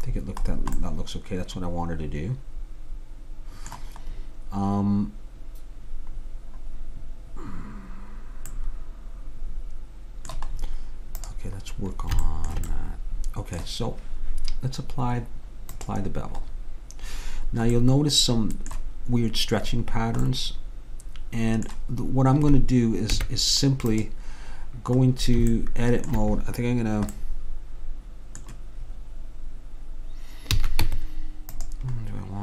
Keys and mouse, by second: 4.1-8.0 middle drag, 8.6-10.1 middle drag, 11.3-13.2 drag, 15.8-17.8 drag, 17.9-23.2 middle drag, 23.2 Tab, 26.5 middle click, 30.6 a, 30.9 Tab.